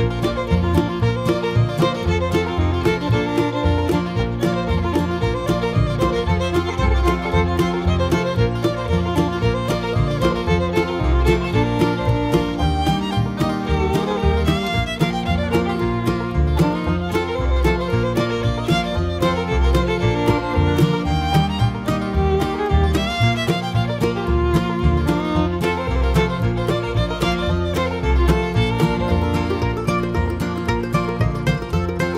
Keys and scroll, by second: 0.3 Return.